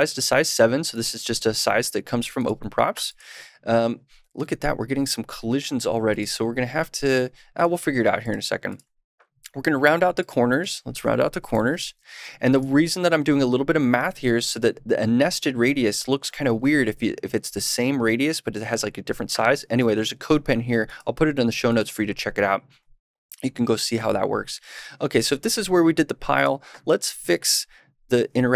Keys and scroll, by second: 0.3 super+s, 11.4 super+/, 11.8 super+s.